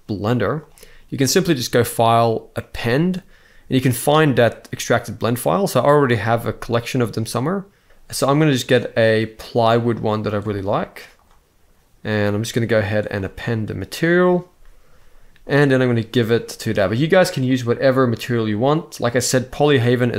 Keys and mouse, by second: 1.5-2.4 drag, 16.2-18.5 drag.